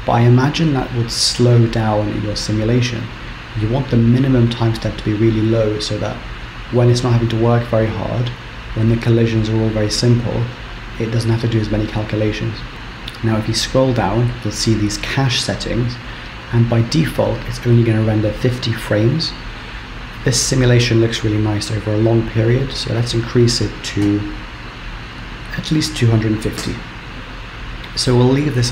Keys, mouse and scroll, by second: 12.7 scroll down 10, 12.8-14.0 scroll down 1, 14.0-17.2 scroll down 5, 23.4 click.